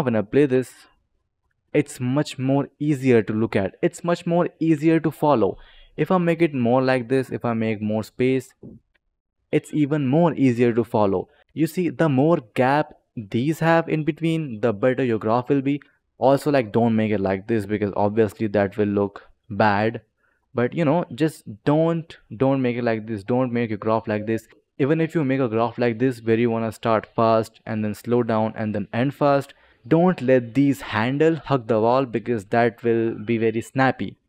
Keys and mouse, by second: 0.4 space, 4.9 click, 5.8 click, 7.0 click, 8.1 click, 8.7 space, 11.4 ctrl+z, 11.4 click, 11.7 click, 12.5 click, 13.0 click, 14.0 click, 14.9 click, 17.8 click, 18.6 space, 20.2 click, 21.0 click, 23.1 click, 24.8 click, 29.7 click, 29.9 click.